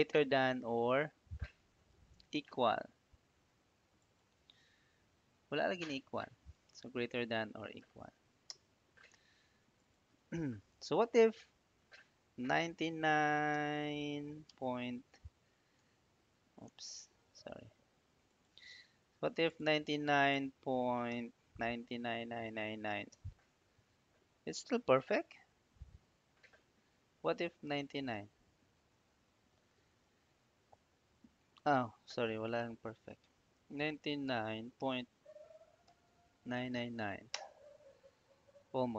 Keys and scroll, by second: 6.4 =, 8.3 Return, 12.5 9, 13.4 BackSpace, 14.3 ., 15.7 Home, 20.9 BackSpace, 21.5 9, 23.0 Return, 24.7 Up, 25.4 Down, 25.8 Up, 27.9 9, 29.6 shift+5, 30.0 Return, 31.3 Up, 33.6 9, 34.7 ., 35.7 9, 37.2 Return.